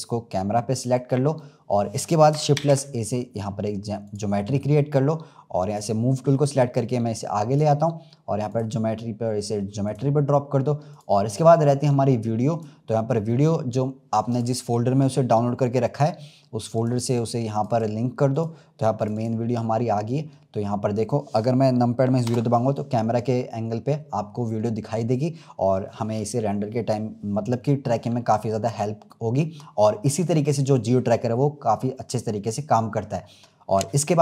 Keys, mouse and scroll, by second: 1.3-2.5 middle drag, 2.5 shift+a, 4.9-5.6 scroll down 2, 5.6-6.8 drag, 8.4-10.9 drag, 12.4-15.6 drag, 22.2 KP_0, 23.8-24.2 scroll up 1.